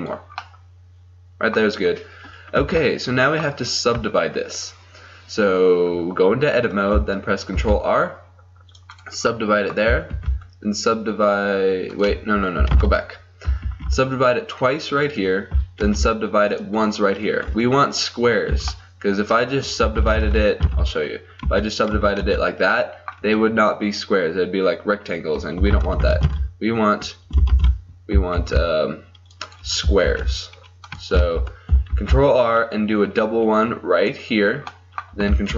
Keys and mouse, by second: 0.1 middle click, 0.5-2.6 drag, 2.6 Tab, 7.6 ctrl+r, 9.4 click, 10.2 ctrl+r, 12.1 click, 12.8 ctrl+z, 15.0 ctrl+r, 15.8 ctrl+r, 18.6 a, 20.0 ctrl+z, 20.3 ctrl+z, 20.7 ctrl+z, 21.5 w, 22.0 w, 22.3 w, 25.9 ctrl+z, 26.1 ctrl+z, 26.3 ctrl+z, 27.6 ctrl+shift+z, 28.4 ctrl+r, 30.1 ctrl+r, 31.3 ctrl+z, 32.0 ctrl+r.